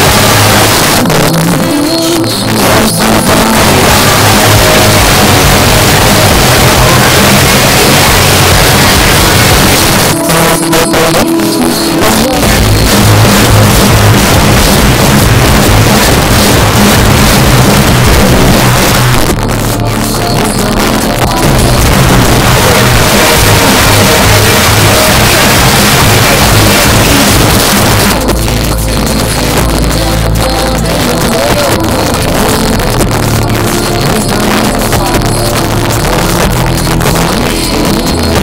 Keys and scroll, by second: 0.7 Page_Down, 9.8 Page_Down, 18.7 Page_Down, 27.6 Page_Down.